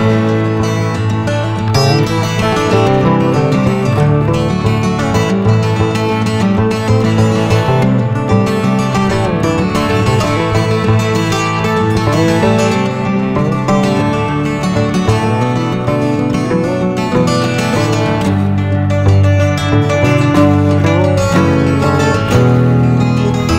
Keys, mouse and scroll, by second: 1.9-2.4 middle drag, 2.4 click, 3.5 Delete, 3.6 scroll up 7, 3.8 shift+a, 6.2 s, 8.3-8.6 scroll down 1, 8.9 click, 10.1 g, 13.0 middle click, 13.1 ctrl+s, 13.5 shift+a, 15.9 r, 19.1 s, 20.9-21.3 scroll up 6, 21.9 click.